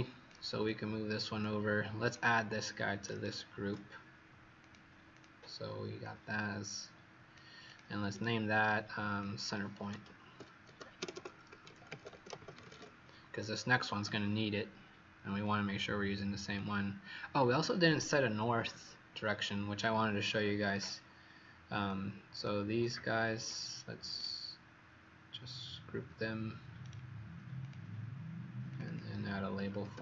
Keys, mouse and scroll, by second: 3.1 shift+right click, 4.5 click, 5.0 click, 5.9 click, 8.0 right click, 9.1 click, 9.7-13.2 typing, 14.0 click, 24.1 right click, 27.5 click, 28.8 click, 29.2-30.0 typing.